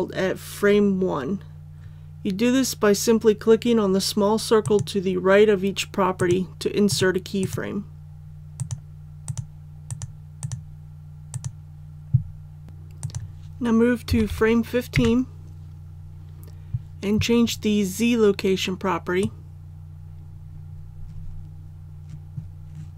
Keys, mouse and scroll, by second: 4.6 click, 14.1 KP_1, 14.2 KP_5, 19.2-22.9 drag.